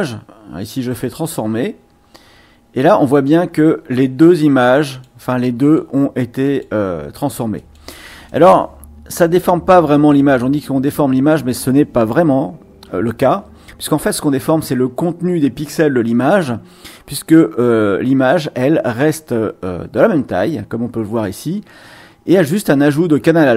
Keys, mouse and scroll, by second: 0.6 click, 3.1 click, 4.2 click, 4.8 click, 5.6 click, 6.4 click, 7.6 click, 8.2 click, 9.9 click.